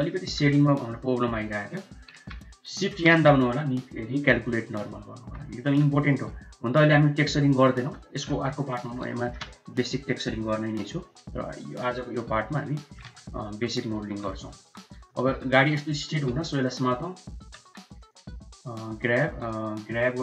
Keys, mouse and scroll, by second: 0.3 shift+middle click, 0.8 click, 2.2 a, 3.0 shift+n, 4.1 q, 5.1 Tab, 5.5 middle click, 7.8 middle click, 8.6-9.0 middle drag, 9.2 shift+middle click, 9.6 middle click, 10.5-12.2 middle drag, 12.4 middle click, 12.9 shift+middle click, 13.5 KP_1, 14.5 Tab, 15.1 shift+middle click, 15.4 shift+z, 16.1 1, 16.3 click, 17.5 Tab, 18.0 click, 18.7 Tab, 19.3 1, 19.5 click.